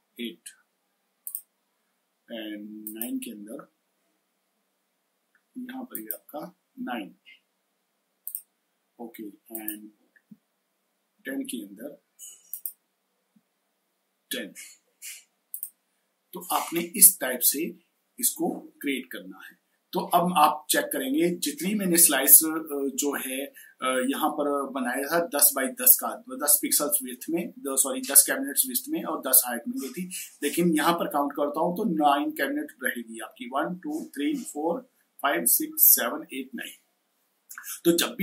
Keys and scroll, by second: 4.2 9, 10.1 1.